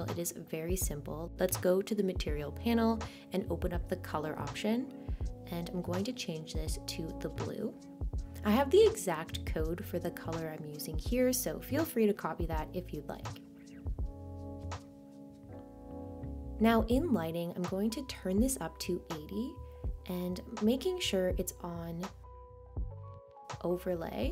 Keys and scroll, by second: 11.4 super+a, 11.8 super+v, 12.8 Return.